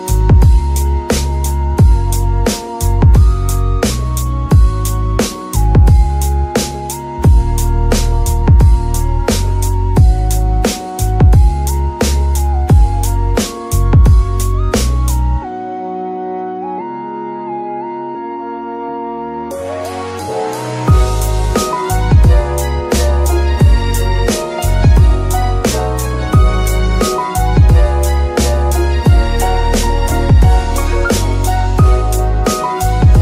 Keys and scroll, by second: 2.5 shift+KP_7, 4.0-6.0 typing, 16.8 shift+z, 17.4 z, 17.9 g, 18.5 Escape, 19.0 KP_3, 22.7 shift+d, 23.1 y, 26.5 g, 26.7 y, 33.1 shift+z.